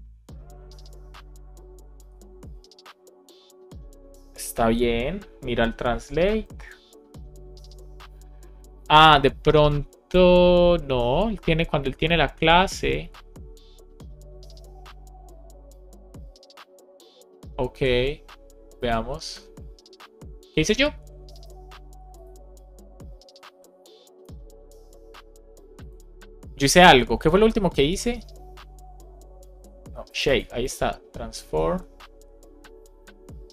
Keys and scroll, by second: 24.1 Return.